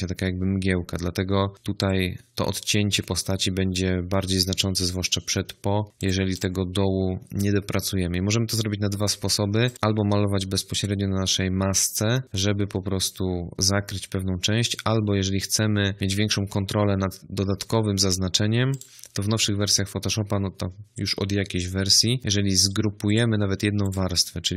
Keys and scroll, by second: 22.2 ctrl+g.